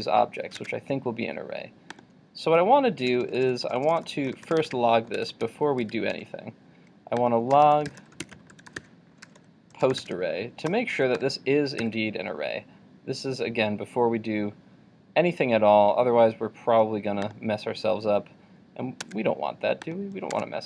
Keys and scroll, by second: 11.8 super+s.